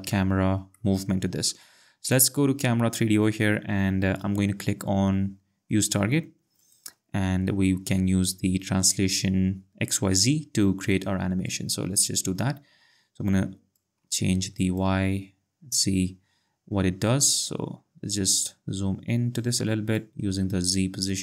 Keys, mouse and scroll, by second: 0.8 click, 2.1 click, 6.6 click, 13.7 click, 19.9 click.